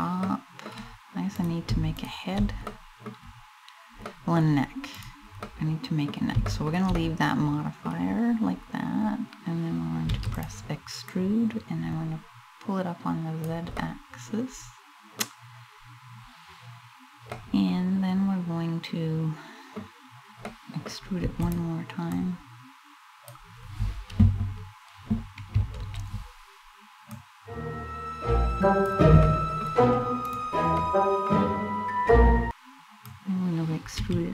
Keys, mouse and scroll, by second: 1.0 right click, 1.6 shift+right click, 2.3 middle click, 3.7 middle click, 4.6 right click, 5.1 middle click, 6.1 shift+middle click, 6.6 middle click, 7.1 middle click, 9.7 e, 10.0 click, 10.7 click, 13.4 middle click, 13.9 middle click, 15.2 scroll up 1, 16.9 middle click, 19.0 middle click, 20.1 middle click, 20.9 e, 21.2 click, 21.8 click, 25.1 ctrl+KP_Add, 26.7 click, 28.9 middle click, 29.9 right click, 30.4 middle click, 32.6 click.